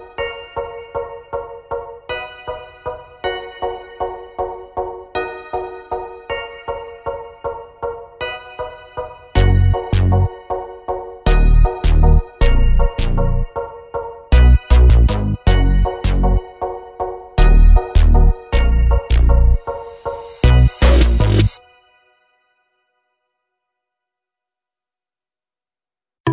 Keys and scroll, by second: 2.1 space, 2.5 p, 5.6 space, 6.4 m, 7.0 Up, 8.9 space, 11.0 e, 14.2 space, 16.6 m, 17.4 Up, 18.3-19.6 typing, 20.7-21.9 typing, 23.1 p.